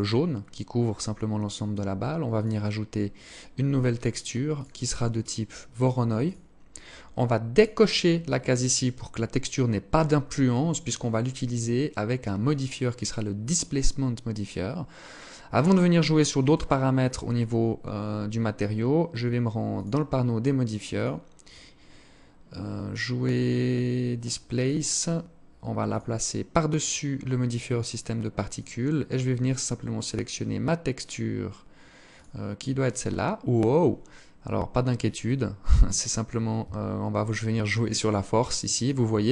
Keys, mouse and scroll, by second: 1.4 click, 3.6 click, 6.6 click, 11.5 click, 18.8 click, 20.5 click, 24.9 click, 25.8 click, 29.0 click, 29.1 click, 32.4-34.0 scroll up 1, 34.2 scroll up 1, 34.3 click, 39.0 shift+click.